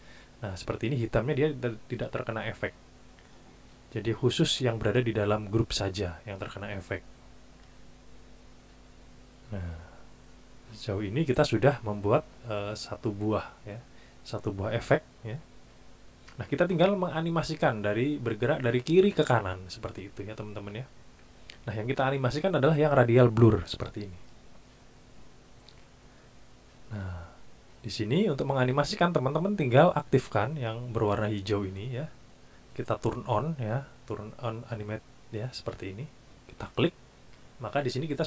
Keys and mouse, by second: 4.2 click, 8.3 click, 11.3 click, 23.3 click, 36.4 click.